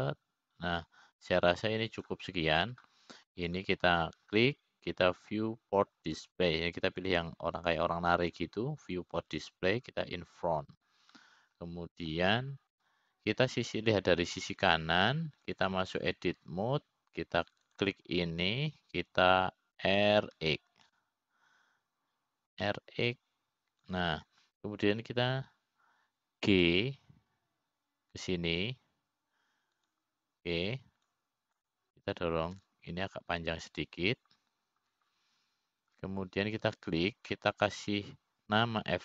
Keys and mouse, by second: 0.1 click, 1.3-4.8 drag, 6.1 click, 7.7 click, 9.6 click, 11.5 click, 12.6 click, 13.7-14.8 middle drag, 18.2 click, 20.2 click, 22.4 r, 29.2 g, 33.7 click, 35.2 g.